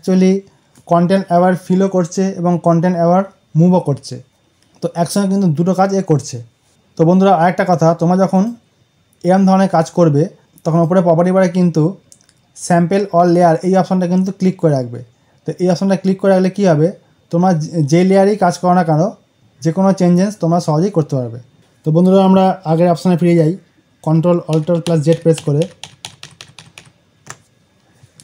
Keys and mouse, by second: 8.2 click, 10.3 right click, 10.6 click, 23.2 alt+Num_Lock, 24.4 ctrl+alt+z.